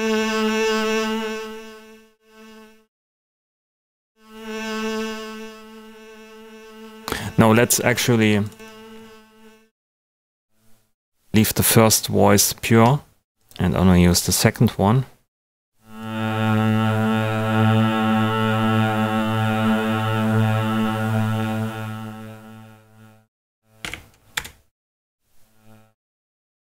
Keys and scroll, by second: 23.5-24.3 typing, 24.3 Return.